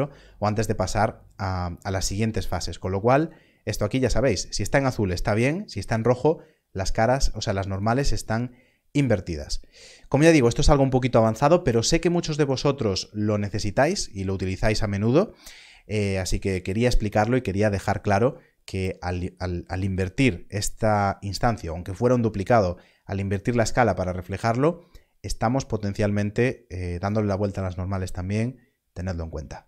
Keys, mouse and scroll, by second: 7.6 click, 19.7 click, 29.2 click.